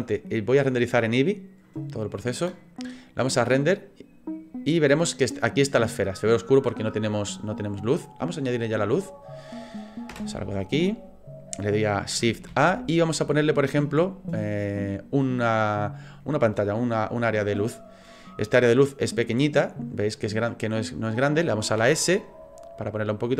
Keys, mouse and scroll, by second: 3.0 click, 10.1 KP_0, 10.9 middle click, 12.5 shift+a, 18.8 click, 20.2-20.8 scroll down 3, 20.6 middle click, 21.8 s.